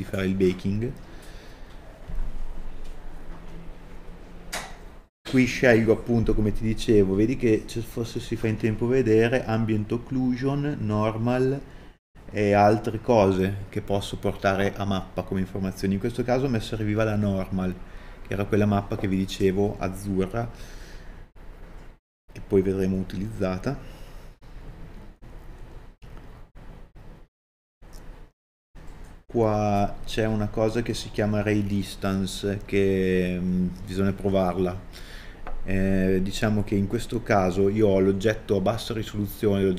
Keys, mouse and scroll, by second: 3.3-4.3 scroll down 1, 25.6 scroll down 1, 28.4 KP_Enter.